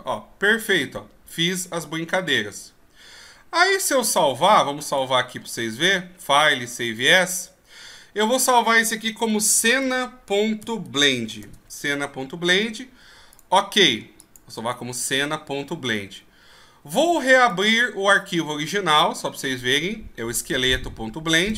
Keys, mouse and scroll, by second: 4.8 click, 14.4 click, 17.5 click.